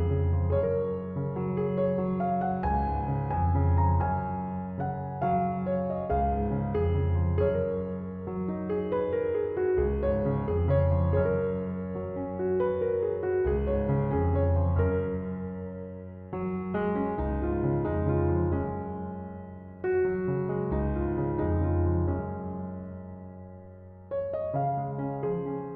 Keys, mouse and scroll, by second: 0.6-2.5 middle drag, 2.5-6.3 drag, 6.6-9.7 middle drag, 10.4 Tab, 10.7-13.7 middle drag, 14.4-18.1 middle drag, 18.1-20.8 scroll up 10, 20.8 click, 21.9-24.9 drag, 25.0-25.7 middle drag.